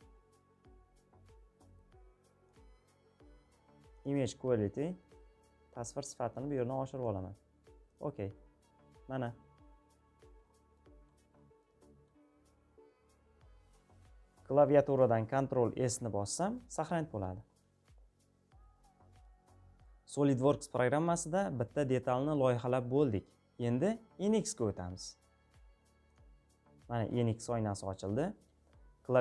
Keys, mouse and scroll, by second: 2.2-9.9 drag, 9.9-16.8 middle drag, 9.9-10.7 scroll, 10.7-11.7 scroll, 14.6-15.6 scroll, 16.8-22.5 scroll up 1, 22.5-23.5 scroll up 1, 23.5-25.8 middle drag, 23.5 scroll up 1, 25.8-29.2 drag.